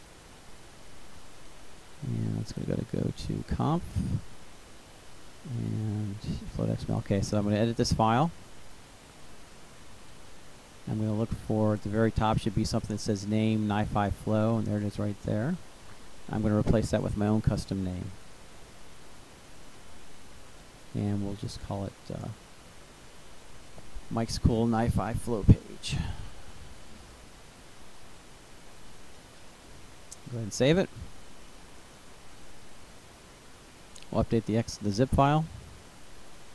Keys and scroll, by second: 17.3-19.8 typing, 21.2-22.5 typing, 23.3 Right, 25.1-27.7 typing.